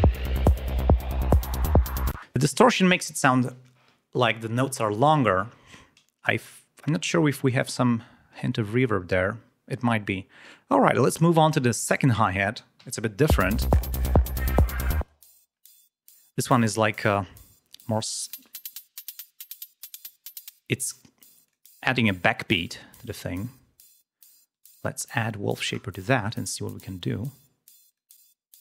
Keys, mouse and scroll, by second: 0.7 click, 1.2 click, 2.1 space, 8.7-9.5 scroll down 4, 10.0-10.4 ctrl+scroll down 5, 10.9 scroll up 3, 11.6 ctrl+click, 13.3 l, 14.0 click, 15.0 click, 15.8 ctrl+scroll up 2, 16.4 ctrl+scroll down 2, 17.9 click, 18.2 click, 19.0-20.0 drag, 20.5 click, 21.5 click, 24.5 right click, 25.7-26.4 scroll down 2, 27.9 click.